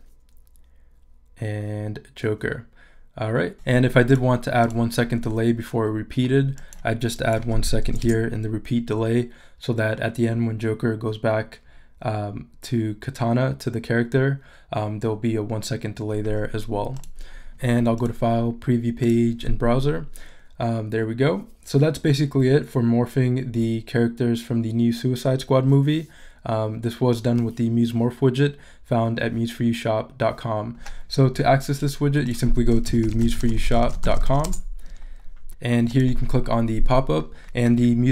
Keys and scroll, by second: 8.0 Return, 32.6-34.8 typing.